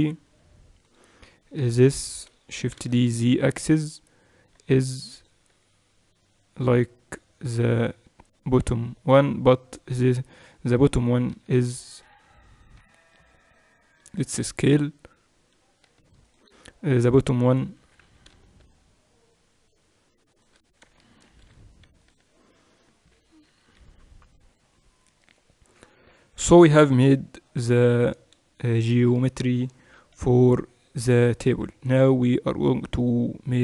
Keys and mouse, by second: 1.7-3.6 right drag, 2.6 shift+d, 5.5 s, 11.3 z, 14.1 s, 16.9-21.0 middle drag, 17.8 s, 21.2 ctrl+alt+shift+c, 23.5 KP_8, 23.8 KP_6, 23.9 KP_6, 24.2 KP_6, 29.9 KP_6, 30.1 KP_6, 30.3 KP_6, 30.5 KP_6.